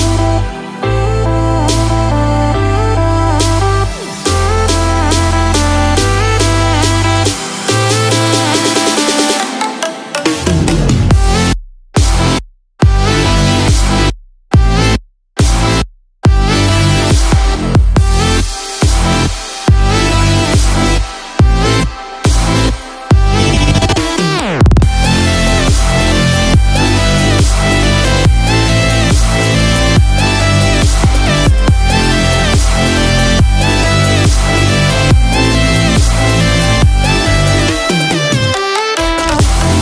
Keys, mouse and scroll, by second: 1.9 click, 3.5-4.4 scroll up 3, 4.4 scroll down 1, 4.9 middle click, 13.7 a, 15.0 s, 21.0 i, 35.5 shift+s.